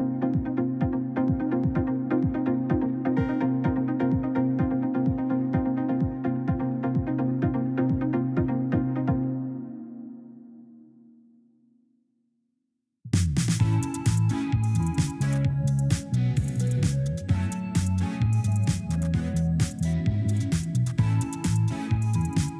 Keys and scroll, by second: 3.2 5, 3.5 Return, 7.9 Delete, 15.8 2, 16.0 Return, 18.3 2, 18.6 Return.